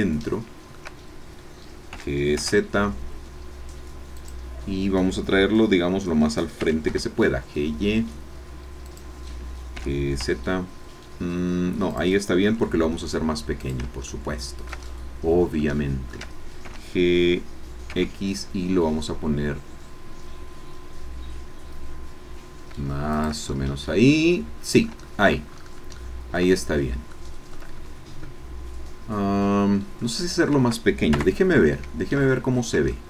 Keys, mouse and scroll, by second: 1.9 g, 2.4 x, 2.4 z, 4.2-6.6 drag, 6.6 g, 6.9 y, 8.8 click, 9.8 g, 10.2 z, 11.9 click, 12.4 s, 13.6 shift+click, 14.1-16.3 shift+middle drag, 16.6 shift+g, 17.9 x, 23.1 shift+click, 23.5 shift+click, 23.8-25.4 middle drag, 25.5-25.8 shift+scroll up 2, 26.0 shift+middle click, 26.5 shift+scroll down 2, 27.1 shift+middle click, 30.2 scroll down 2, 31.1 KP_0, 32.4-32.7 shift+scroll up 3, 32.9 shift+middle click.